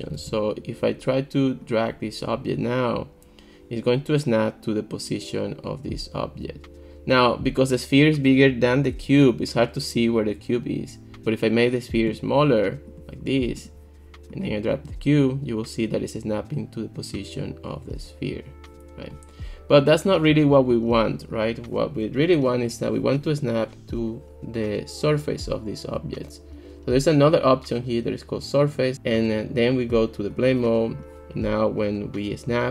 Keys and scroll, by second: 0.2 ctrl+x, 11.2 super+z, 20.3 super+z.